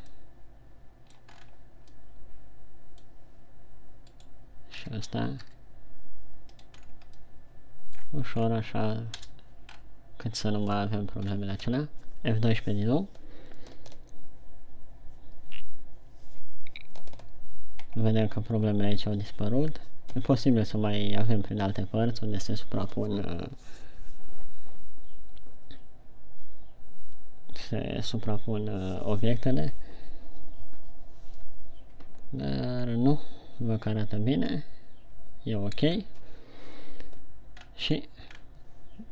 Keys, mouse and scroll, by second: 0.1 click, 0.2 scroll down 5, 0.7 middle click, 2.2-3.0 scroll up 5, 3.0 middle click, 4.7 right click, 5.2 g, 7.1 click, 7.4-7.8 scroll down 2, 7.8 middle click, 9.2 scroll down 4, 9.9 KP_0, 10.1-10.4 scroll up 3.